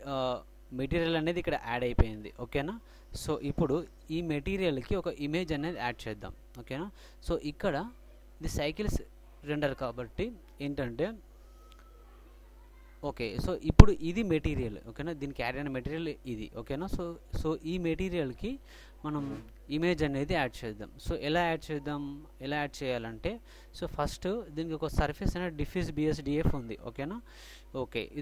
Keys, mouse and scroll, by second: 7.7-9.5 middle drag, 9.5-11.2 drag, 11.3 click, 12.0-14.2 middle drag.